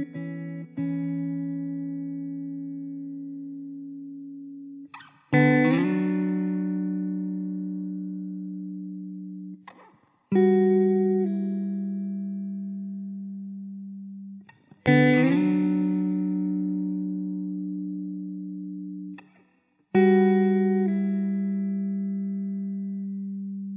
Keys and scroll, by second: 12.0 ctrl+s, 13.9 shift+a, 16.9 s, 19.4 s, 20.9 Tab, 21.8 3.